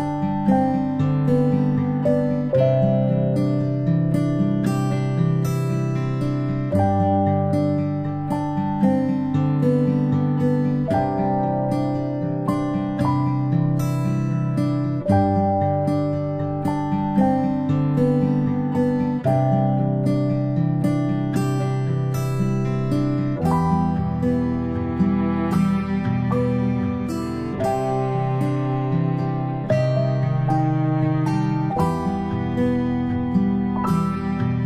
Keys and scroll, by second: 14.6 ctrl+z, 19.4 i, 24.6 ctrl+], 29.1 p, 32.2 ctrl+z, 32.5 ctrl+z.